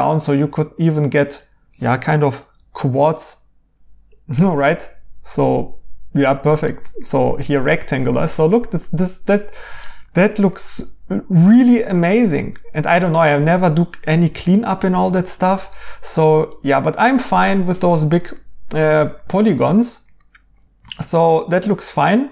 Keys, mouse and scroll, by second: 4.0 right click, 6.6 right click, 12.7 right click, 16.8 right click.